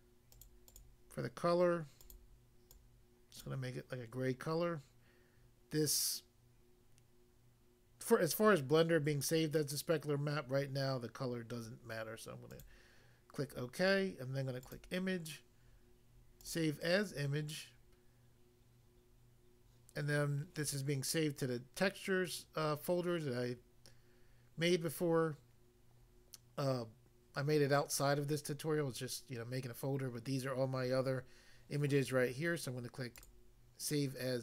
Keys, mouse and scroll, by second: 0.3 click, 0.4 click, 0.6 click, 0.7 click, 1.9 click, 2.1 click, 2.7 click, 3.4 click, 4.3 click, 12.5 click, 12.7 click, 14.6 click, 14.7 click, 16.4 click, 16.5 click, 33.2 click.